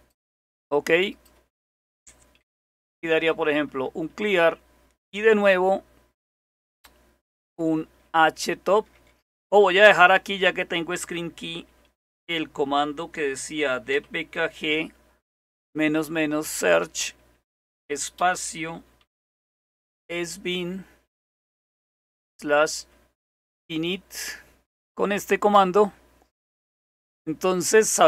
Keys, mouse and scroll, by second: 0.0 click, 7.8 typing, 13.5 typing, 15.6-17.0 typing, 18.2-24.1 typing, 25.5 typing.